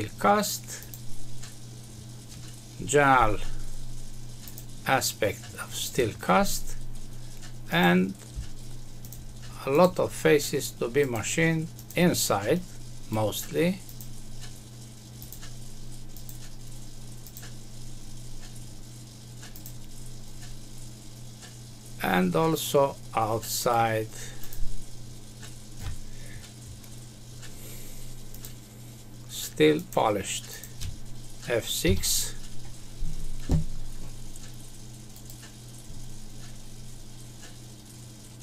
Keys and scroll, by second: 31.8 F6.